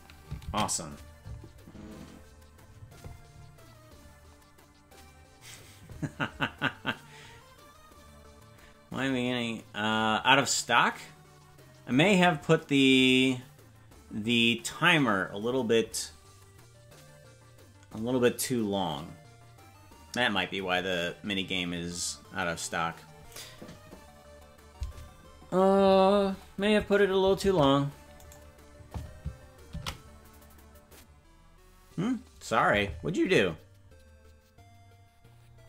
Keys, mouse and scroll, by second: 3.1 ctrl+s, 27.4 ctrl+Tab, 28.2 right click, 32.4 ctrl+s.